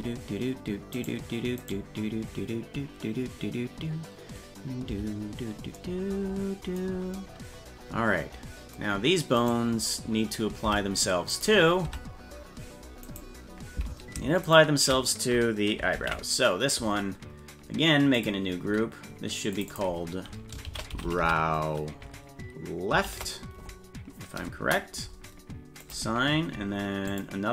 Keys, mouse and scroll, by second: 0.0 Tab, 1.0 right click, 1.7 right click, 4.9 Tab, 9.5 right click, 10.7 Tab, 11.4 right click, 11.9 Tab, 13.1 right click, 14.5 shift+right click, 16.0 ctrl+l, 17.2 scroll down 1, 18.2 click, 19.6 click, 19.7-25.0 drag, 25.8 click, 27.1 click.